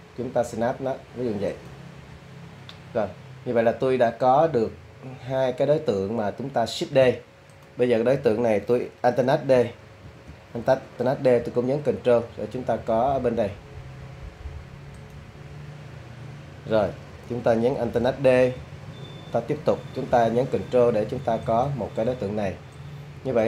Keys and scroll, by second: 10.1 ctrl+alt+d, 18.4 ctrl+alt+d.